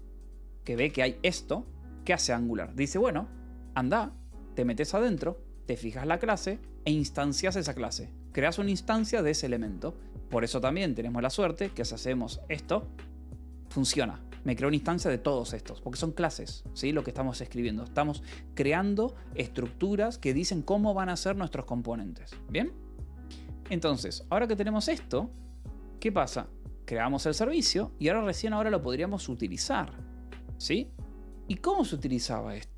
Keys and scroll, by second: 0.0-1.2 typing, 1.9 Escape, 3.2-5.6 typing, 6.4 Escape, 11.3 ctrl+6, 11.9 y, 12.4 p, 16.2 u, 18.8-19.8 typing, 23.4-25.6 typing, 26.8-28.0 typing, 28.3 Return.